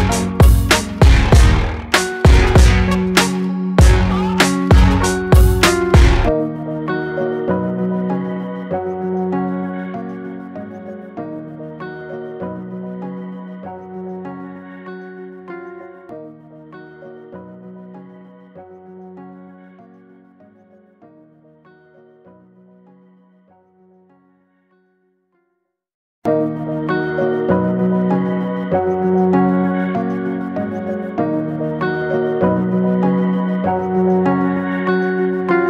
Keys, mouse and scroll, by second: 0.0 click, 0.5-2.2 right drag, 2.2 click, 2.6 drag, 2.7 scroll down 2, 3.0-3.5 middle drag, 3.7-4.3 middle drag, 4.3 click, 4.5 scroll up 6, 4.9 scroll down 1, 5.6 click, 6.2-7.7 middle drag, 7.7 Tab, 8.1 click, 9.0 click, 9.7 alt+click, 10.3 alt+click, 11.1 s, 11.9 Tab, 12.1 scroll down 2, 12.7 click, 13.2 click, 13.5-16.1 middle drag, 17.1 n, 18.2 shift+a, 20.2-20.8 scroll up 7, 21.6 g, 25.1 Tab, 26.6 m, 29.4 g, 30.7 x, 33.3 click, 34.0 click, 35.4 g.